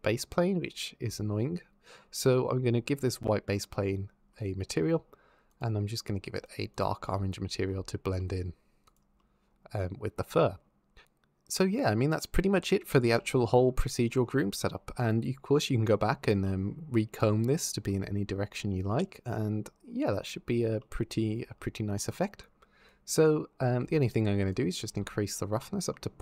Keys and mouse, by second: 2.9 click, 5.3 click, 8.7 click, 14.8 click, 21.8 click, 22.2 click, 23.4 g, 23.9 click, 24.4 click.